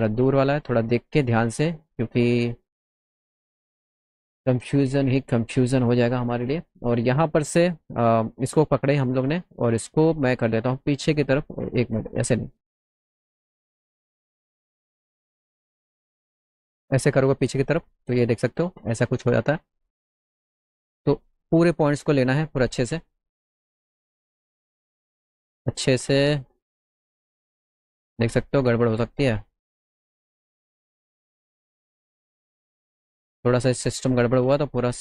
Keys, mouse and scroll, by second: 0.2 middle click, 0.7 middle click, 1.0 middle drag, 4.6 click, 7.2 click, 8.2 click, 9.4 click, 10.5 click, 11.7 ctrl+z, 13.1-13.5 scroll up 4, 13.8 click, 14.6 ctrl+z, 15.4 click, 17.7-18.7 drag, 18.7 ctrl+z, 19.6 middle click, 21.0 click, 22.6 click, 23.4-24.5 middle drag, 24.6 ctrl+z, 26.0-27.3 drag, 27.3 ctrl+z, 28.5-29.7 drag, 32.9-34.1 drag.